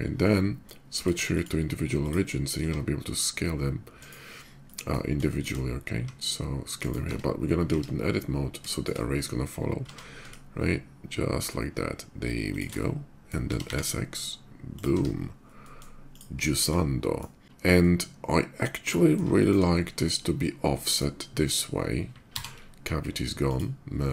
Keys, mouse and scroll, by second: 0.7 click, 1.0 click, 1.8 click, 2.8 s, 3.7 right click, 4.0 middle click, 4.4 middle click, 5.0 shift+middle click, 5.7 s, 6.4 click, 6.5 right click, 6.9 Tab, 7.4 a, 8.4 shift+middle click, 9.0 shift+middle click, 9.6 s, 12.3 shift+click, 12.5 shift+middle click, 13.2 s, 13.5 x, 14.5 click, 14.7 Tab, 15.1-15.5 middle drag, 15.9 click, 16.2 shift+middle drag, 16.7 shift+middle click, 17.6-18.9 shift+middle drag, 19.1 shift+middle click, 20.1-20.7 shift+middle drag, 21.1 shift+middle click, 22.0 alt+v, 23.0 click, 23.8-24.1 middle drag.